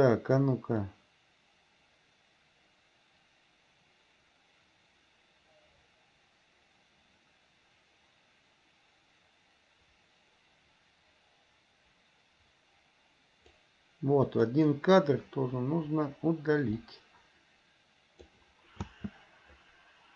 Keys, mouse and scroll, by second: 1.0-13.8 drag, 14.5 click, 15.8 Delete, 17.0-18.5 drag, 19.0 space.